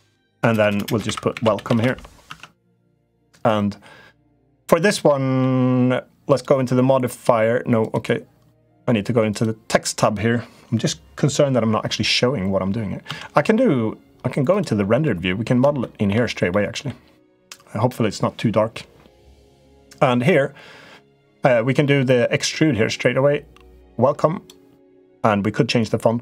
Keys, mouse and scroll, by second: 0.1-1.6 typing, 2.0 Tab, 3.3-4.6 drag, 5.0 middle click, 6.1 click, 7.6 click, 12.8 z, 14.9 middle click, 15.7 middle click, 16.4 middle click, 22.2-24.3 drag.